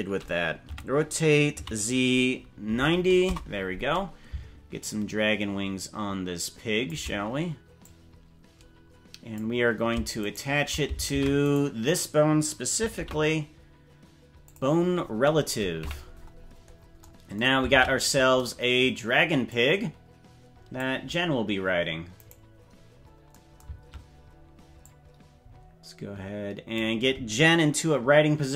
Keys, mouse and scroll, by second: 0.7 r, 4.8-6.9 shift+drag, 7.8-9.4 drag, 10.3 shift+right click, 11.1 ctrl+Tab, 11.5 right click, 12.9 ctrl+p, 15.9 KP_Decimal, 16.5-16.9 scroll down 7, 17.7 ctrl+Tab, 19.5-20.8 drag, 22.3 right click, 22.9-23.3 scroll down 4, 24.8-26.8 drag.